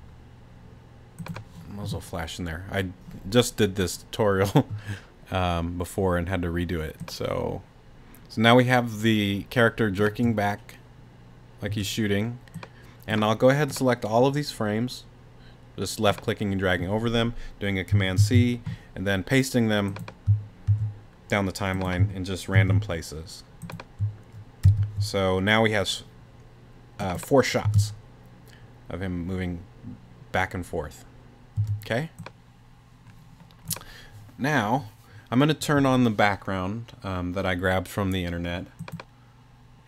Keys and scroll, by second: 10.1 space, 11.7 space, 18.2 super+c, 20.7 super+v, 22.5 super+v, 24.6 super+v, 27.6 space, 31.6 space.